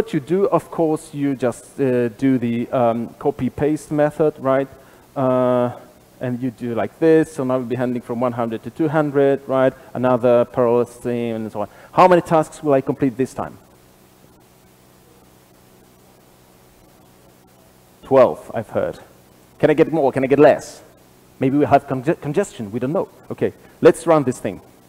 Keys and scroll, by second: 1.5 super+b, 5.9 super+/.